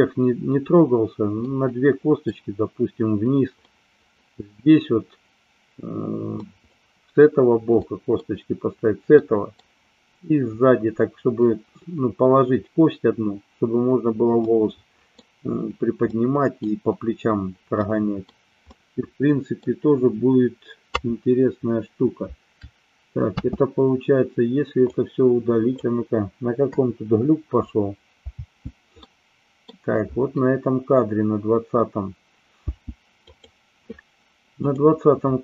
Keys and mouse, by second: 1.4-2.2 middle drag, 3.6-4.2 middle drag, 6.4 middle click, 7.7-8.1 middle drag, 9.1-9.6 middle drag, 14.4-15.1 middle drag, 16.0-16.6 middle drag, 17.8 middle click, 18.6-19.6 middle drag, 23.4 space, 24.7-25.7 drag, 26.6 Delete, 28.4 space, 29.1 middle click, 32.7 space, 33.2 click, 34.6 click.